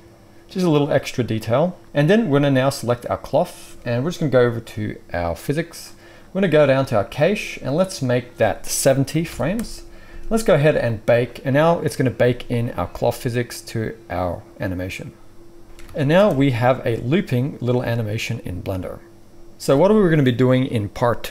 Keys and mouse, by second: 2.9-5.3 right drag, 5.5-7.0 right drag, 11.1-15.7 drag, 11.1-15.7 middle drag, 11.1-15.7 right drag, 15.6 ctrl+shift+s, 15.8 alt+a, 16.1 space.